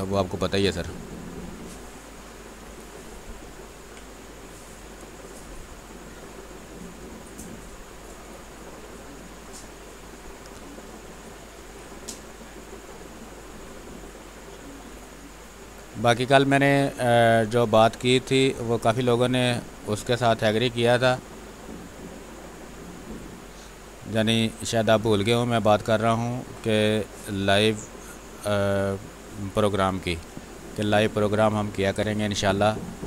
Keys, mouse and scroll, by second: 0.8-2.6 drag, 2.6 space, 2.7 click, 3.1 space, 3.7 click, 4.8 space, 4.9 click, 5.2 space, 5.5 ctrl+z, 6.0-7.7 drag, 7.7-9.6 drag, 9.6-11.5 drag, 11.5 space, 11.7 click, 12.0 space, 13.0-14.8 drag, 14.8 space, 15.0 click, 15.6 space, 15.7 space, 16.0-23.0 drag, 23.0 space, 23.2 click, 23.5 space, 24.4-29.6 drag, 29.6 click, 30.8 x, 30.9-33.0 drag.